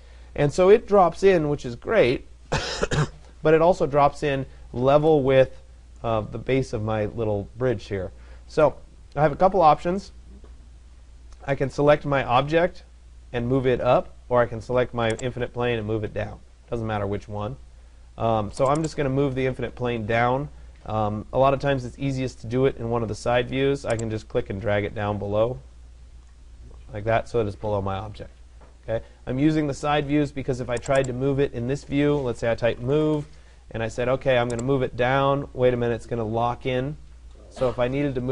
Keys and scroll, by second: 32.6 Return.